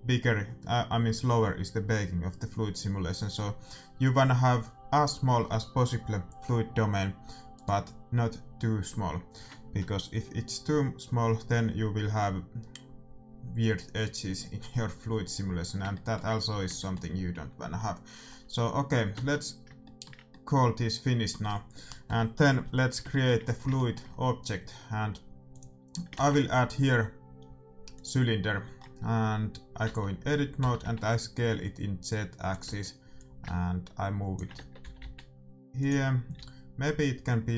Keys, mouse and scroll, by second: 7.5-9.3 right drag, 15.3-20.0 middle drag, 19.1 Tab, 23.0-26.1 middle drag, 25.4-27.3 drag, 26.1 shift+a, 28.7-31.8 middle drag, 29.8 Tab, 30.5 s, 32.6 Tab, 33.1-35.0 drag, 34.5 Tab, 34.9 s, 36.3 a.